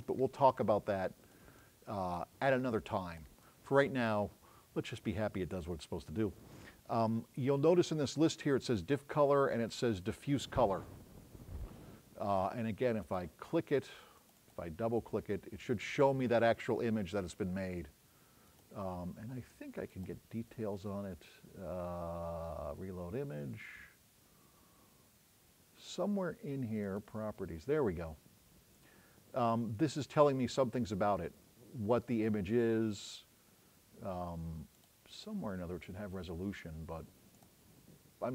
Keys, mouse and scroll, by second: 18.6 click, 19.9 right click, 26.9 click, 37.4 click.